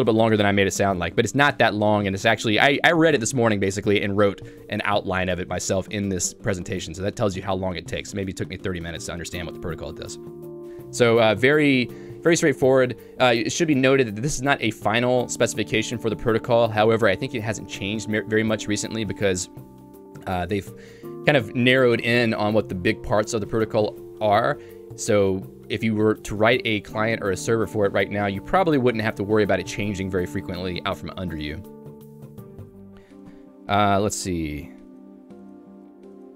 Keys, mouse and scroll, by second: 0.6 ctrl+d, 0.7 ctrl+d, 1.3 g, 2.1 Escape, 5.2 ctrl+u, 5.6-10.5 ctrl+u, 10.9 j, 11.5 k, 33.3 u.